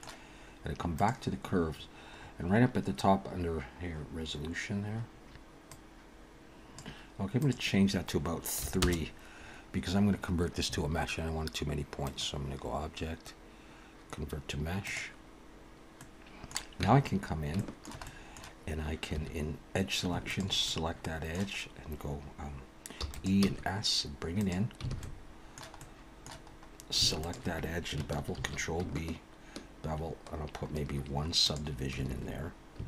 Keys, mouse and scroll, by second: 0.9 click, 2.1-4.0 scroll up 8, 5.7 click, 8.3 click, 12.1 click, 16.0 middle click, 16.8 Tab, 17.1-17.6 scroll up 4, 17.6 shift+middle click, 18.0 middle click, 19.1 2, 20.3 alt+shift+click, 20.6 middle click, 23.0 e, 23.4 s, 24.9 alt+a, 25.0 alt+middle click, 25.8 middle click, 26.5-26.8 scroll up 2, 27.2 alt+shift+click, 28.3 ctrl+b, 32.1 alt+a, 32.7 a.